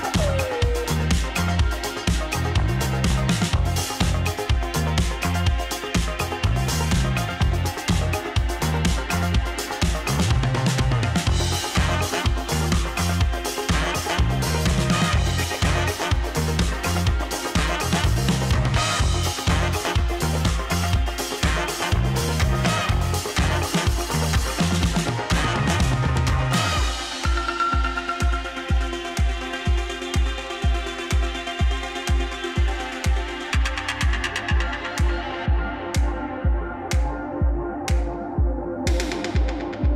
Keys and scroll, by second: 9.6-10.6 typing, 33.1-33.9 typing.